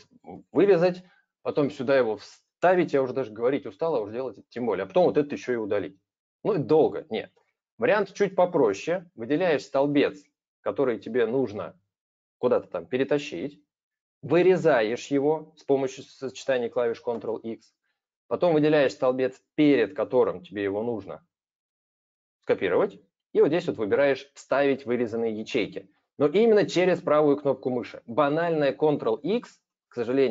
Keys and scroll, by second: 0.6 ctrl+x, 2.6 ctrl+v, 5.2 ctrl+-, 7.0 ctrl+z, 16.9 ctrl+x.